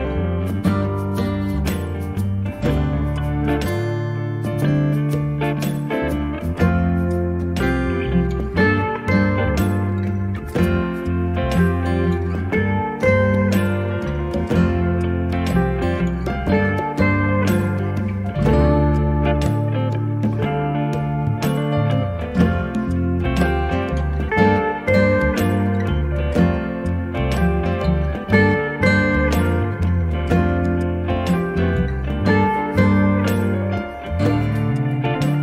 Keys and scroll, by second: 1.9 b, 6.3 space, 16.4 r, 18.9 space, 23.7 space, 23.8 p, 24.8 8, 25.2 0, 25.7 Return, 27.9 space, 31.9 m.